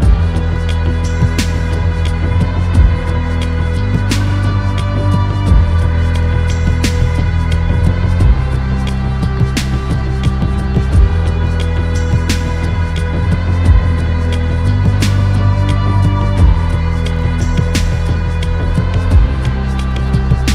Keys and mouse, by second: 0.7 middle click, 4.4 shift+a, 11.2-15.9 drag, 16.7 middle click, 17.8-20.5 drag.